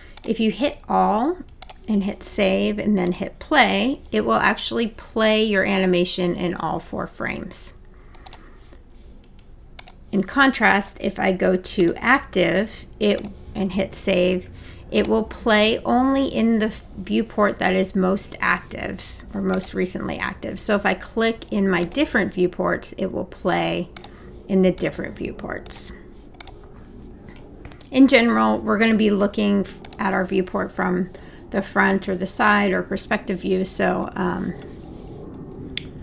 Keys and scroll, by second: 27.7 space.